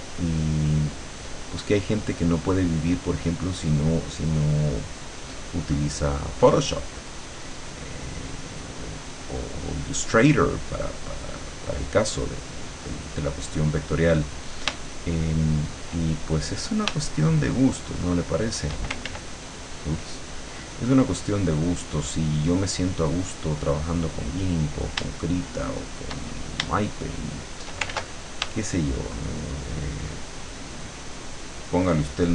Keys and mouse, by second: 10.1-14.5 drag, 15.0 shift+middle click, 15.3 shift+click, 17.1-18.8 shift+drag, 18.8 shift+middle click, 19.1 ctrl+shift+z, 21.0-24.9 drag, 27.3 shift+click, 28.0 ctrl+shift+z, 29.4 shift+click, 29.8-32.3 shift+middle drag.